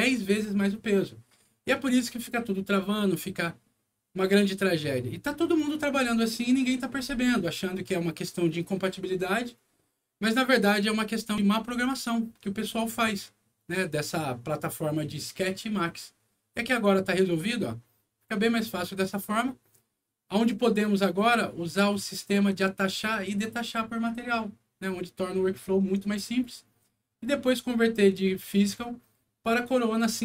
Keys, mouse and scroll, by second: 12.6 click.